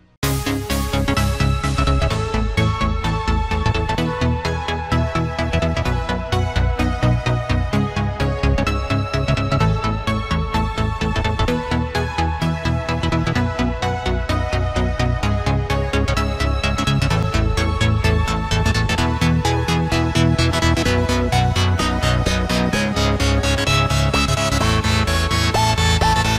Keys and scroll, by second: 2.3 Return, 15.7 ctrl+d.